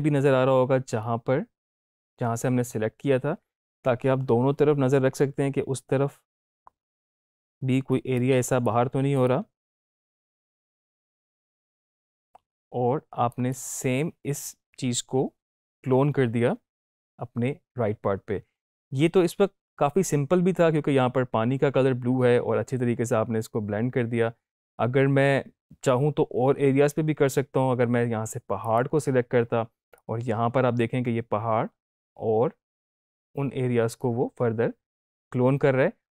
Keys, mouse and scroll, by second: 7.9-9.1 right drag, 9.1-13.5 drag, 27.2 alt+Num_Lock, 28.6 alt+click, 29.9-36.1 drag.